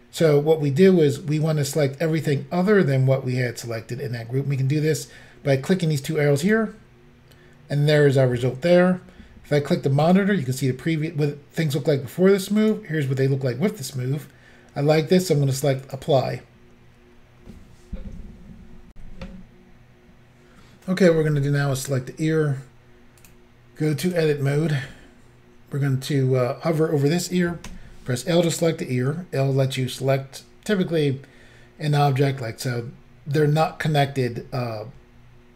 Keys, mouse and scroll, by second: 6.4 click, 6.5 click, 10.0 click, 12.6 click, 15.9 click, 16.0 click, 18.9 Insert, 21.9 click, 23.2 click, 24.1 click, 27.7 l.